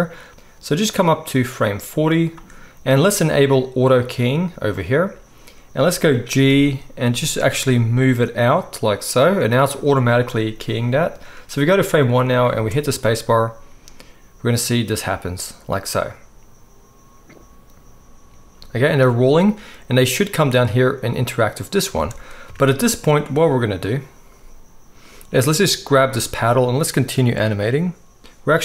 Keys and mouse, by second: 0.3 space, 4.8-11.0 middle drag, 6.5 g, 11.0-24.0 drag, 12.5 space, 22.1 space, 24.0-28.6 middle drag.